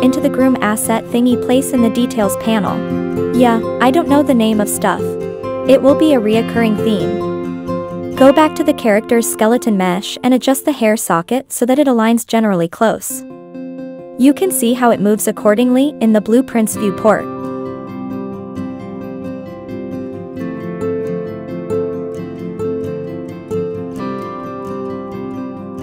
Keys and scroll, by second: 3.9 Up, 4.0 Left, 4.1 Down, 4.2 Left, 4.3 Right, 4.5 Right, 4.6 Right, 4.7 Up, 4.7 Down, 4.8 Up, 5.0 Down, 5.9 Up, 6.1 Down, 6.2 Left, 7.9 Up, 8.1 Up, 8.1 Right, 8.3 Down, 15.9 Right, 16.1 Up, 16.3 Down, 16.4 Up, 16.5 Left, 16.8 Right, 17.0 Left, 17.2 Left, 17.5 Left, 20.5 Right, 20.6 Right, 20.8 Up, 20.9 Left, 21.0 Left, 21.2 Left, 21.4 Right, 21.6 Right, 21.7 Up, 21.8 Down, 22.0 Left, 23.9 Left, 24.3 Right, 24.4 Right, 24.6 Right, 24.7 Left, 24.8 Left, 24.9 Right, 25.0 Up.